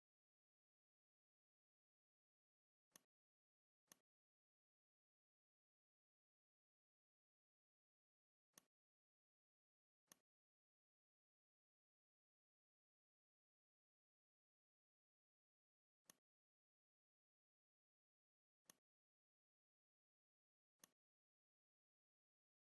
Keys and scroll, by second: 7.2 v, 8.2 r, 9.7 v, 15.0 shift+c, 18.2 a.